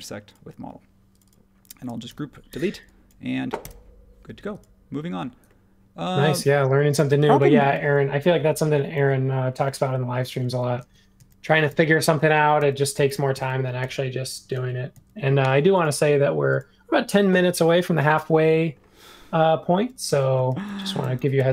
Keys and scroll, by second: 2.0 super+g, 2.5 BackSpace, 3.6 BackSpace, 7.7 super+z, 8.9 super+z, 9.7 super+z, 10.4 super+z, 20.1 super+z, 20.5 super+z, 20.6 super+z.